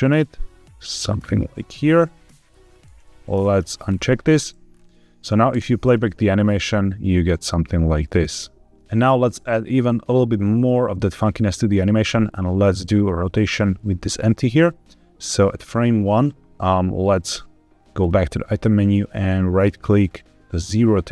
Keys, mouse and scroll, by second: 1.1 scroll down 1, 1.4 shift+middle click, 3.8-4.1 drag, 4.6-5.4 scroll up 2, 5.4 space, 8.9-11.6 drag, 12.8 click, 14.7-15.7 drag, 17.9 click, 20.7-21.1 right drag.